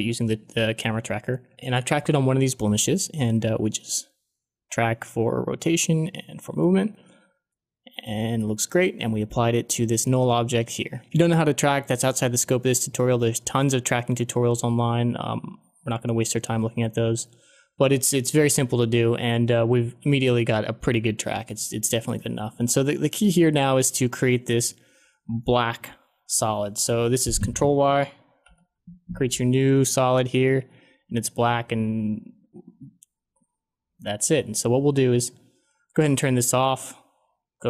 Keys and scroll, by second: 28.4 ctrl+y.